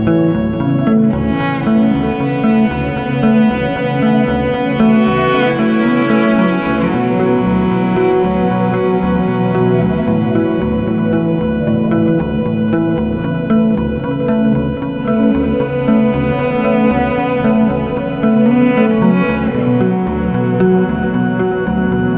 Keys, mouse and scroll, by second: 0.6-1.7 scroll down 3, 1.7-2.8 middle drag, 2.8 click, 3.9 h, 4.9 click, 8.3 click, 9.9-12.6 drag, 14.1-16.0 drag, 16.3 KP_0, 20.6-22.1 drag.